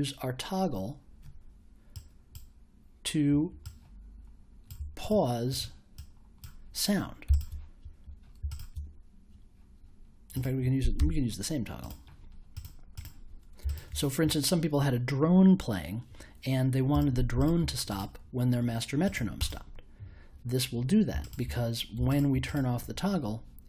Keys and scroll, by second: 10.9 BackSpace.